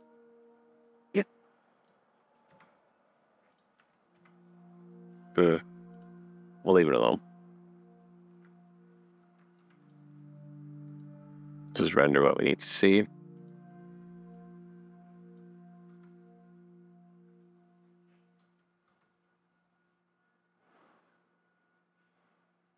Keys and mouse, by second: 9.6 ctrl+b, 13.5 click, 15.9 space, 18.4 space, 18.8 space.